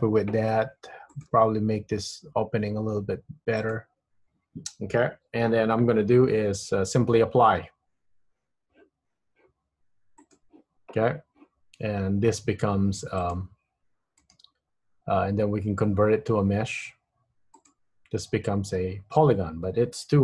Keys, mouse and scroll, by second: 0.1 KP_1, 1.2 click, 1.4 g, 9.2 Tab, 10.4 click, 13.3 click, 14.4 right click, 18.4 Tab, 19.3 Tab.